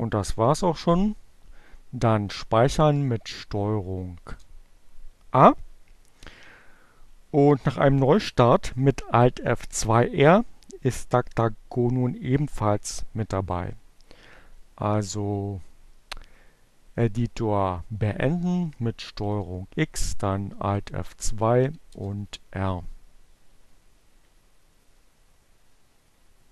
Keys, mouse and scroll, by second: 0.4 ctrl+o, 2.8 Return, 18.1 ctrl+x, 19.1 alt+F2, 20.6 r, 20.8 Return.